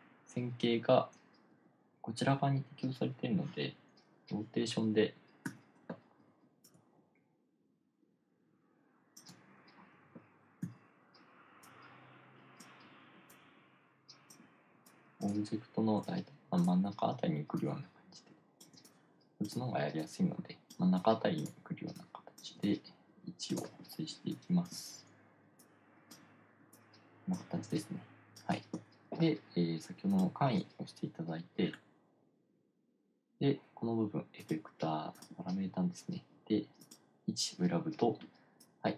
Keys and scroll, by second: 5.9 r, 11.1 e, 24.7 1.